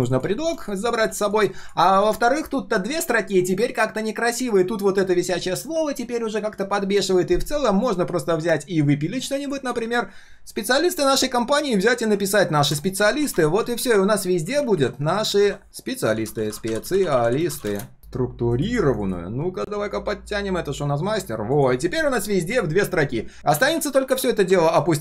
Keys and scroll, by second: 0.9 alt+space.